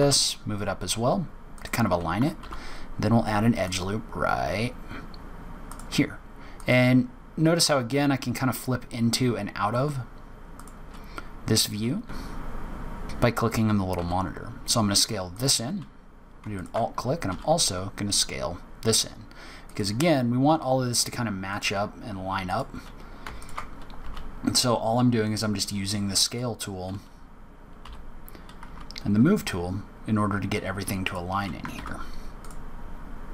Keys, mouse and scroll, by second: 2.3 ctrl+r, 6.6 click, 10.5 click, 11.6 s, 13.9 s, 16.5 alt+click, 17.2 s, 21.4 click, 22.4 click, 23.9 s, 26.2 alt+click, 27.7 g, 31.7 ctrl+r.